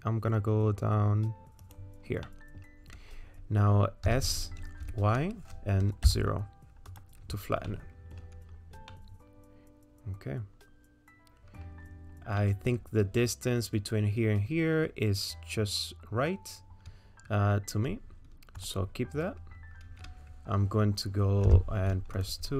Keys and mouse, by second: 2.3 middle click, 4.1 s, 7.7 middle click, 8.9-11.6 middle drag, 12.4 middle click, 22.2 middle click, 22.2 2.